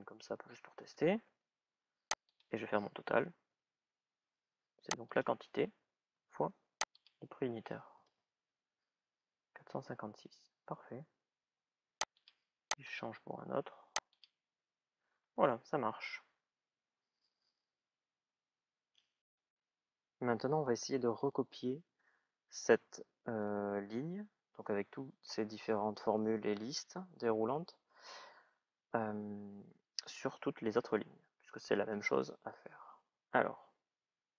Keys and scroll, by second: 0.3 shift+-, 0.5 Return, 7.7 Return.